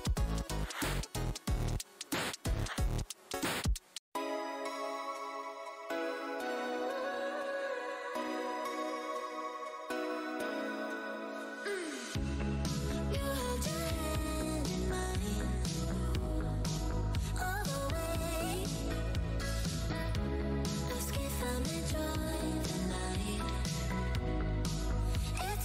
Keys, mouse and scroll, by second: 1.3 click, 1.4 Tab, 2.3 scroll down 1, 3.0-3.7 scroll down 1, 3.9 click, 6.8-7.5 scroll down 2, 8.2 alt+Tab, 8.9 click, 8.9 Tab, 9.2 right click, 9.7 click, 10.4 right click, 11.2 right click, 11.3 Tab, 11.4 click, 11.5 Tab, 12.1 right click, 12.3 Tab, 12.3 click, 12.7-13.3 scroll up 1, 13.3 Tab, 13.4 click, 15.0 right click, 15.4 alt+Tab, 16.2 shift+v, 16.7 shift+v, 17.4 shift+v, 17.6 Tab, 18.2 Tab, 18.3 alt+click, 18.5 alt+scroll up 1, 19.2 shift+Tab, 20.0 shift+click, 21.1 Tab, 21.7 p, 21.9 click, 23.8 Tab, 24.4 alt+Tab, 24.5-24.9 alt+scroll up 1, 25.1 Tab.